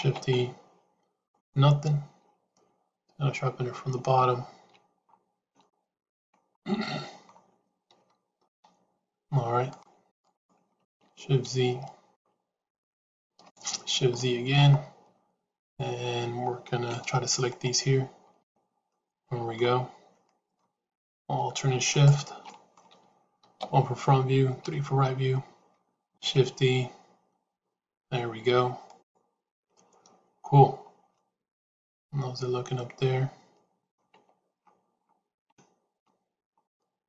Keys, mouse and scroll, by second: 5.5 shift+middle click, 6.5 middle click, 8.4 c, 12.6 shift+z, 13.7 shift+z, 14.1 shift+middle click, 18.9 middle click, 20.1 middle click, 21.8 shift+click, 22.4 middle click, 23.5 KP_1, 24.5 KP_3, 26.1 shift+e, 31.0-33.9 middle drag, 34.1 Tab, 35.4 shift+middle click, 36.5-37.0 middle drag.